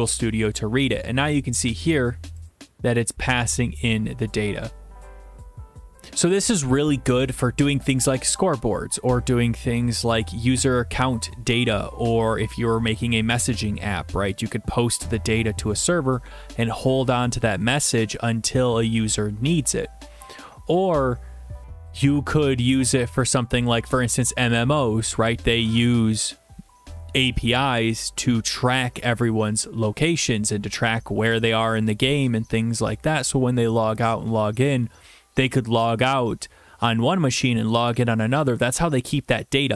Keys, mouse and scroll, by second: 2.5 click.